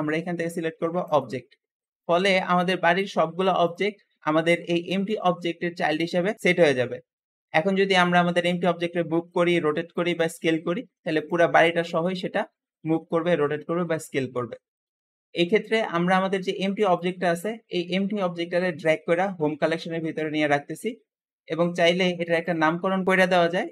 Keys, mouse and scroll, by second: 3.5 click, 3.9-4.4 scroll down 2, 4.4 g, 6.3 scroll up 1, 6.4 middle click, 7.0-7.6 scroll down 2, 7.6-8.1 scroll down 3, 8.1 g, 9.5 r, 10.2 s, 11.4-11.8 scroll up 2, 11.8 r, 13.2 s, 15.7-18.4 drag, 21.6 click, 22.2 click, 22.9 shift+click, 23.5-23.7 typing.